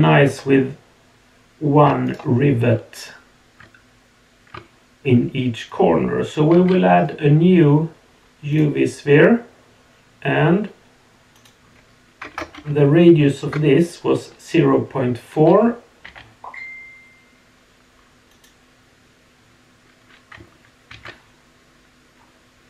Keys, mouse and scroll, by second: 0.5 scroll up 1, 2.1 shift+right click, 6.5 shift+a, 11.4-13.5 drag, 16.1 g, 20.9 shift+d.